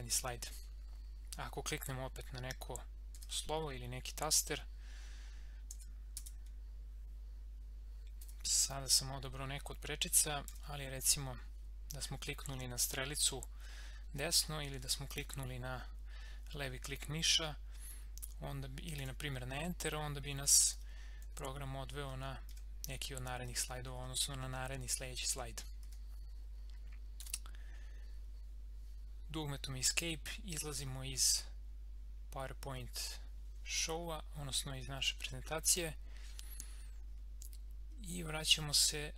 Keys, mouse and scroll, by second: 3.1 typing, 5.8-6.1 typing, 10.3 g, 10.5 Right, 15.0 click, 18.9 Return, 20.8 Left, 22.1 Right, 23.5 Left, 25.8 Right, 27.7 Right.